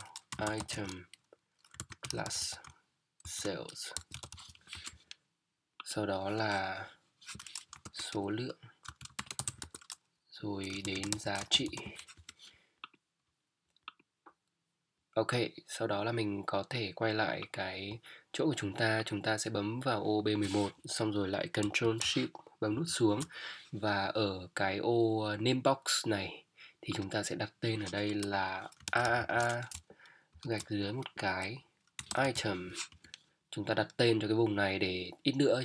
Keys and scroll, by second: 0.3 Return, 0.7-2.6 typing, 3.9 shift+a, 4.1 |, 4.7 Return, 7.8 shift+s, 8.1 shift+o, 8.9 [, 9.6 Tab, 10.8 shift+g, 11.0 shift+i, 11.1 a, 11.5 t, 12.1 Return, 22.7 ctrl+shift+Down, 28.8 shift+a, 30.3 shift+-, 32.0 i, 32.1 Return, 32.3 m, 32.9 Return.